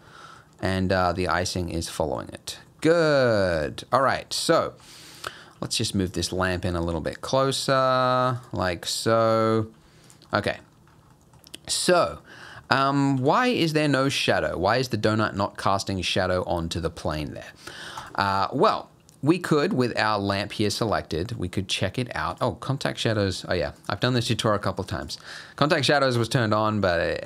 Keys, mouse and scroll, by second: 0.1 middle click, 0.7 middle click, 1.4 middle click, 1.9 middle click, 2.2-2.7 scroll down 7, 3.6 click, 4.1 scroll up 1, 4.3 middle click, 4.6 scroll down 2, 4.9 middle click, 5.6 g, 6.3 g, 7.3 scroll up 1, 7.4 middle click, 7.8 g, 8.7 middle click, 9.5 scroll down 3, 9.7 g, 10.3 middle click, 10.7-11.0 scroll up 5, 11.1 middle click, 11.4 scroll down 2, 11.8 shift+middle click, 12.2 middle click, 12.7 shift+middle click, 12.9 scroll up 1, 13.2 g, 14.4 scroll up 2, 16.5 scroll down 2, 18.0 click, 22.3 click, 23.8 click, 25.0 click, 25.7 click, 26.2 click, 26.6-27.2 scroll up 3.